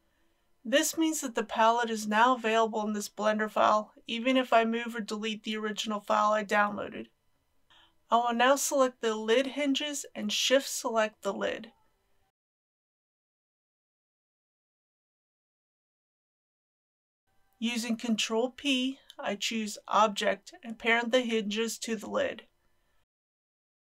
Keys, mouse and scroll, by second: 7.7-8.7 middle drag, 8.9 click, 15.3 shift+click, 18.0 ctrl+p, 20.9 click, 22.2 g, 23.2 click, 23.8 ctrl+z.